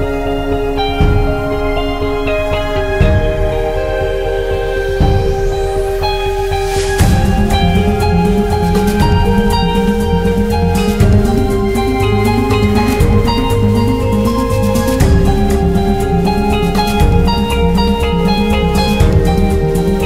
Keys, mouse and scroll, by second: 2.9-4.4 drag, 6.3-9.4 drag, 12.7-15.6 middle drag, 15.6-17.1 drag, 17.1 7, 18.6 Return, 19.3 space.